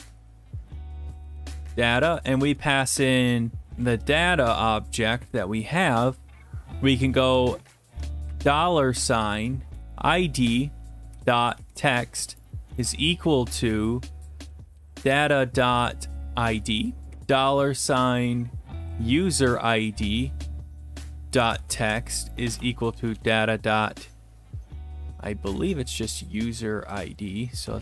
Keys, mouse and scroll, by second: 0.0-5.6 typing, 2.8 Left, 8.3 typing, 9.7 Down, 11.1-13.2 typing, 12.1 Return, 14.3-17.1 typing, 18.6-19.0 typing, 19.4 Return, 21.3-23.3 typing, 25.6 click, 27.0 click, 27.3 click, 27.4 click.